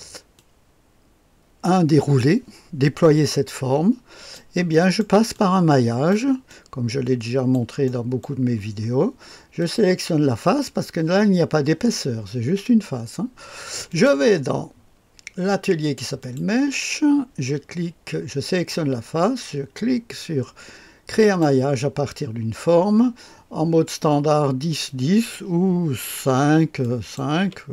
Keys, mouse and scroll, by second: 0.3-4.3 drag, 4.6 middle click, 5.3 click, 6.4-7.8 drag, 7.8 middle click, 8.5-9.4 scroll up 1, 8.9-9.4 middle drag, 9.4 scroll up 1, 9.5 click, 13.8 click, 16.1 click, 21.1 click, 24.8 click, 26.1 KP_5, 26.7 click, 27.3 KP_5.